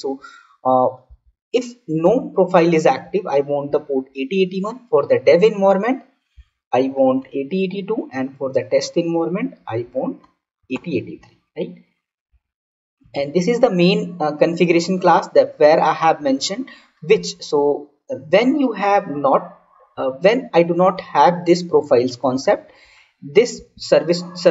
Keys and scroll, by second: 22.3 ctrl+/.